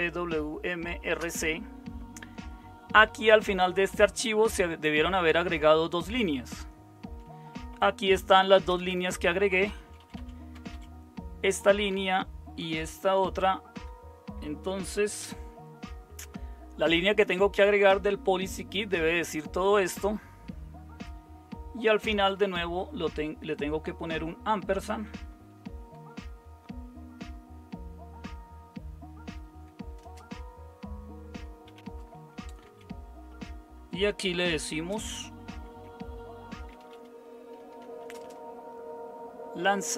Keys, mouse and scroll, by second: 2.9-4.0 typing, 7.3-10.2 typing, 10.5 Down, 10.7 Up, 11.9 Up, 13.7 Down, 13.7 BackSpace, 18.5 Right, 19.2 Right, 19.3 Right, 20.0-25.1 Right, 25.3 Right, 25.5 Right, 25.6 Right, 25.9 Right, 29.5 Left, 30.0 space, 31.7-32.6 typing, 34.2-34.9 typing, 36.4-38.5 typing.